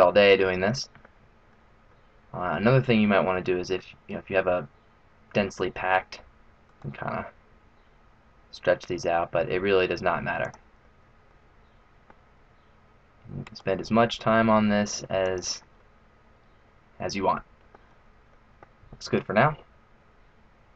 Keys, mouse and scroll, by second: 0.2 middle click, 1.0 middle click, 1.8 middle click, 2.8 middle click, 3.5 middle click, 6.6 right click, 7.1 g, 11.2 middle click, 13.4 right click, 13.7 g, 15.7 middle click, 17.8-18.6 scroll down 2, 18.2 middle click, 20.3-20.7 scroll down 1.